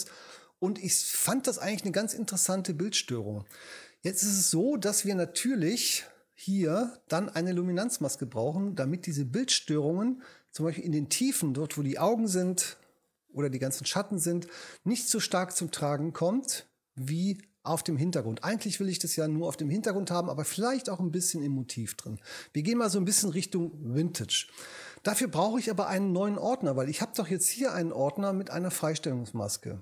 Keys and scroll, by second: 12.5 h.